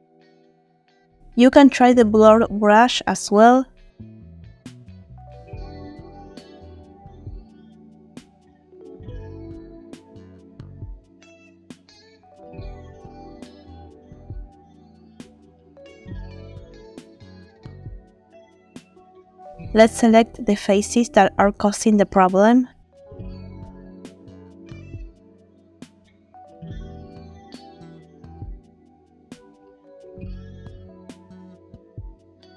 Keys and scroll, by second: 2.8 f, 15.9 space, 16.6 ctrl+space, 18.8 space.